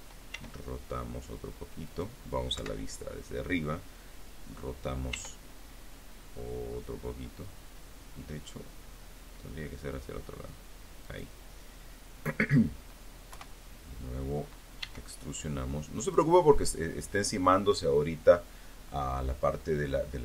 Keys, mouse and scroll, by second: 0.0 click, 0.7 KP_7, 3.3 r, 9.2 click, 11.5 KP_1, 12.9 e, 14.2 click.